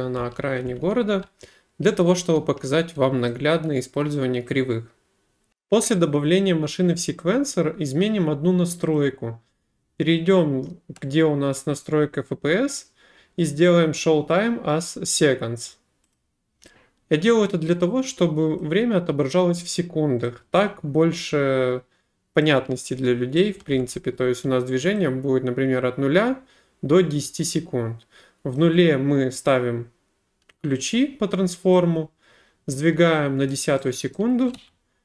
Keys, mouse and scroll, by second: 0.0-1.8 typing, 3.3 right click, 4.9-5.7 typing, 9.0 click, 16.2 click, 18.6 click, 22.4 click, 23.4-24.4 typing, 24.4 right click, 28.6 click, 33.5 click, 34.2 right click, 34.6 w.